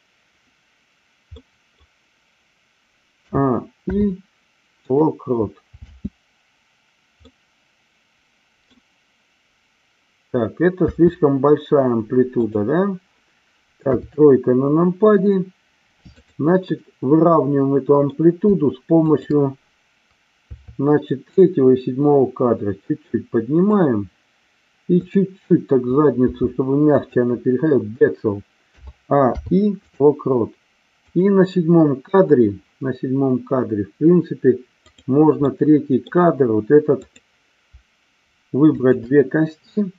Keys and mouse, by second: 1.4 middle click, 3.1 a, 3.9 i, 5.8 space, 7.4-8.8 middle drag, 10.9 space, 12.4 click, 13.7 KP_3, 16.0-17.2 drag, 17.2 middle click, 20.4 KP_3, 21.2-23.6 drag, 24.8-25.8 drag, 26.2 r, 26.8 click, 28.7 a, 29.2 i, 31.0 click, 34.9 click, 35.4-36.3 middle drag, 38.8 shift+click.